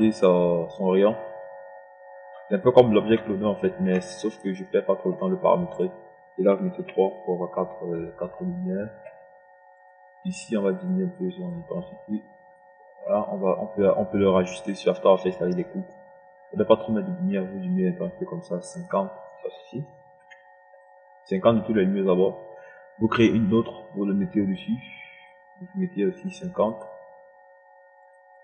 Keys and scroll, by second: 7.5 KP_3, 20.7 KP_5.